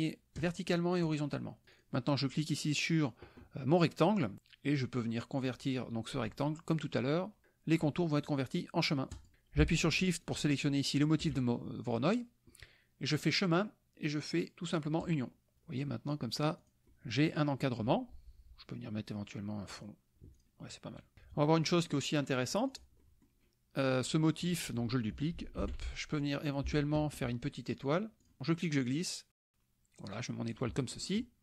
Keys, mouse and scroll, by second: 0.4 click, 1.1 click, 1.7 click, 5.4 click, 9.2 click, 10.2 shift+click, 13.3 click, 15.0 click, 15.8 click, 16.6 click, 16.8 KP_Subtract, 16.9 click, 19.7 click, 20.4 click, 21.2 KP_Subtract, 21.6 click, 22.7 click, 24.0 click, 24.5 click, 25.6 ctrl+d, 26.2-27.3 ctrl+drag, 28.2 click, 29.0-30.7 drag.